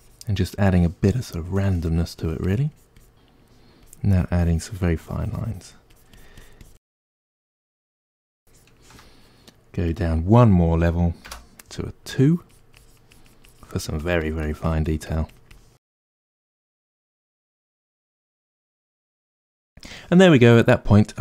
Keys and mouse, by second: 1.4-2.4 shift+drag, 2.4-3.9 ctrl+middle drag, 3.9-19.0 shift+drag, 4.9 f, 6.8 f, 19.0-21.2 ctrl+middle drag.